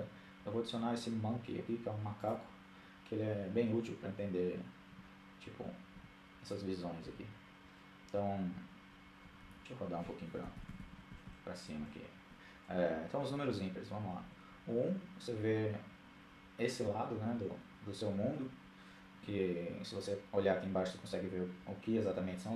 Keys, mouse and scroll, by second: 3.9 KP_1, 5.0 KP_3, 5.9 KP_4, 8.2 KP_2, 8.4 KP_2, 9.5-10.2 KP_8, 10.7 KP_8, 13.2 KP_1.